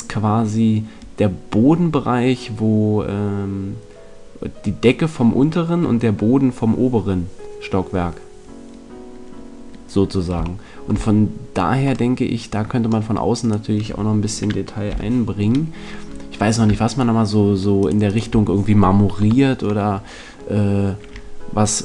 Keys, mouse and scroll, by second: 10.6-12.0 middle drag, 13.4-15.2 right drag, 14.8 z, 15.2-16.8 middle drag, 16.8-20.0 right drag, 19.2 KP_1, 20.0-21.8 middle drag.